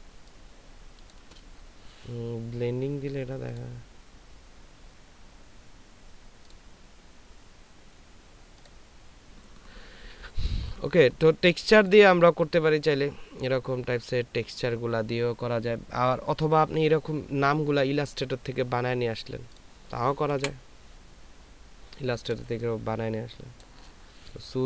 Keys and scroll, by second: 0.1 ctrl+space, 20.8 Delete, 22.5 ctrl+space.